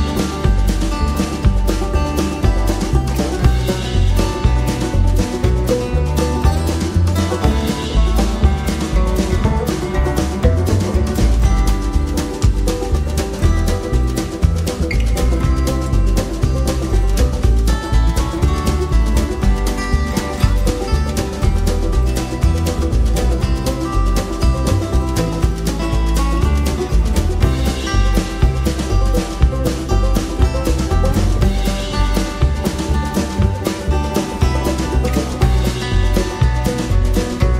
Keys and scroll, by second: 21.7 Return, 34.1 Return, 35.2 Return, 35.9 Return.